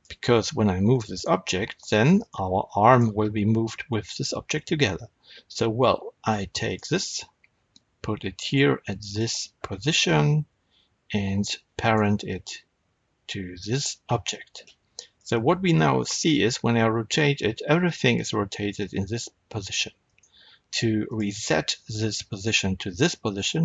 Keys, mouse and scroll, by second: 0.8 r, 2.2 right click, 2.8 click, 6.5 click, 8.9 shift+click, 11.8 ctrl+p, 15.0 click, 16.1 r, 20.1 right click, 21.0 click.